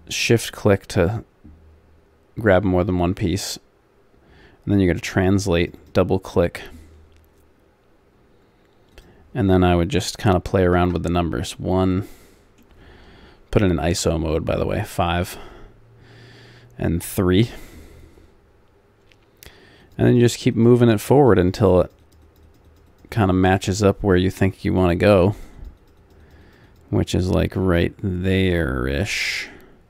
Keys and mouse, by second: 5.4-7.3 drag, 8.9-10.9 drag, 11.9 middle click, 14.0 KP_5, 15.3 KP_3, 19.8 click, 29.2-29.8 drag.